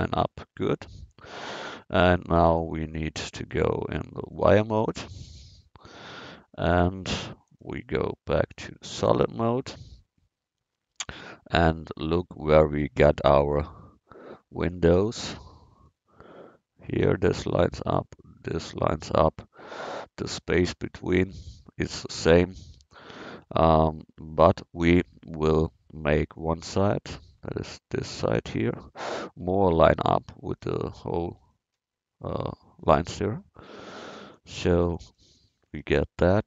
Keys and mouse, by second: 0.6-2.0 middle drag, 3.4-5.2 drag, 5.2-6.4 middle drag, 7.5-15.9 middle drag, 23.6-24.8 drag, 24.8 Tab, 25.6 Tab, 26.4-28.1 drag, 29.5 Tab, 30.6 a.